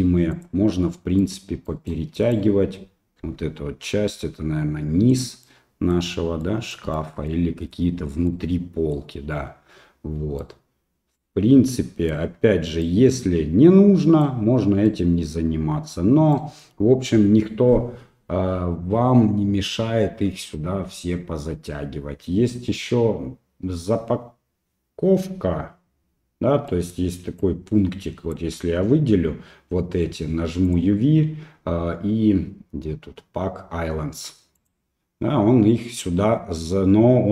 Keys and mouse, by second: 1.2 right click, 1.7 right click, 2.1 right click, 3.2 g, 5.5 middle click, 6.4 middle click, 6.9 shift+middle click, 7.3 middle click, 8.3 middle click, 10.4-12.2 right drag, 12.8-14.2 right drag, 14.9-16.4 right drag, 26.8 middle click, 27.4 click, 30.8-34.7 drag.